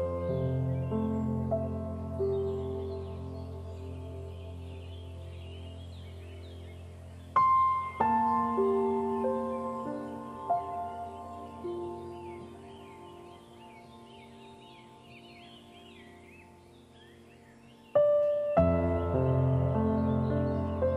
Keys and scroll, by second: 3.9 ctrl+0.